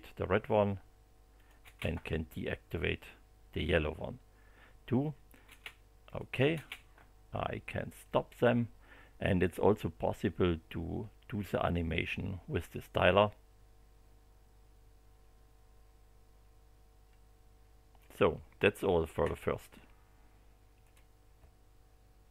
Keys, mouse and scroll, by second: 1.3 click, 1.6 space, 5.4 space, 6.0 click, 6.5 space, 8.0 click, 10.1-18.2 drag, 20.8 click, 22.2 click.